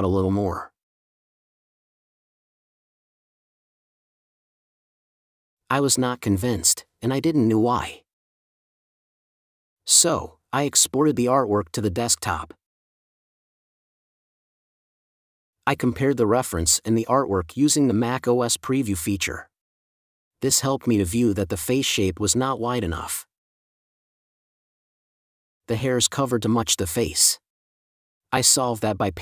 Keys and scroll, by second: 1.5 super+d, 4.3 super+q, 5.2 super+q, 6.8 space, 11.9 space, 13.0 space, 15.4 space, 16.1 super+w, 16.6 space.